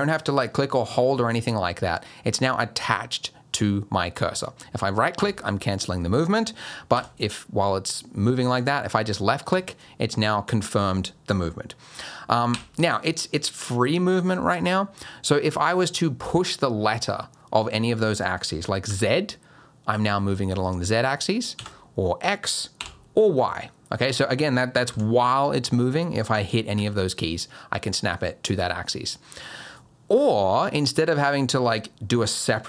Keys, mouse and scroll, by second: 6.9 g, 12.5 g, 24.9 g.